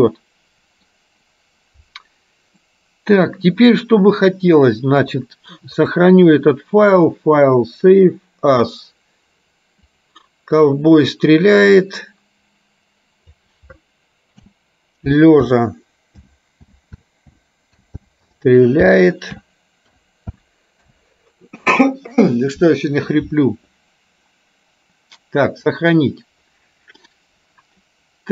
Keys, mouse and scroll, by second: 2.7 middle click, 5.9-8.9 drag.